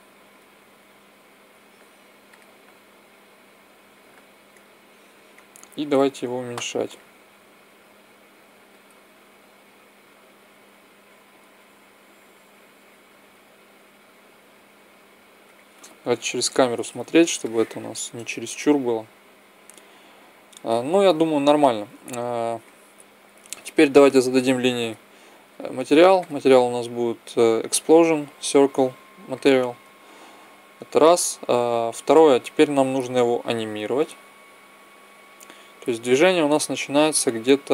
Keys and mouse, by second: 5.6-7.4 right drag, 6.6 s, 9.4 s, 12.9 s, 15.2 click, 15.9 KP_0, 16.1 click, 24.2-27.8 drag, 25.3 right click, 27.8 middle click, 32.6-34.4 drag, 34.4 middle click.